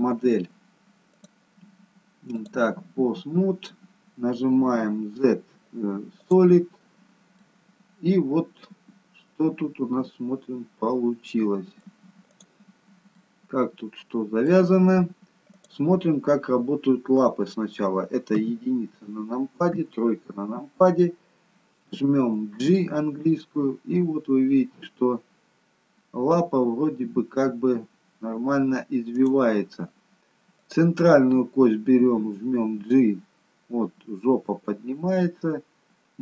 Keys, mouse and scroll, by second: 1.1 click, 4.7 z, 7.4 middle click, 12.2 click, 13.1 middle click, 16.1 click, 18.3 KP_1, 19.7 KP_3, 22.7 g, 30.5 click, 31.9 g.